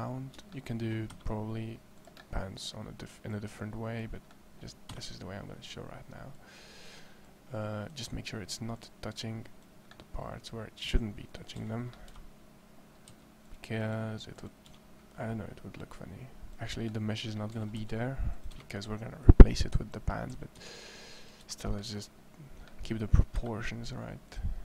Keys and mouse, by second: 0.9 e, 4.7 e, 9.7 middle click, 11.3 a, 12.9 c, 15.7 click, 17.3 a, 17.6 a, 17.9 c, 20.1 a, 20.3 a, 20.5 c, 23.2 e.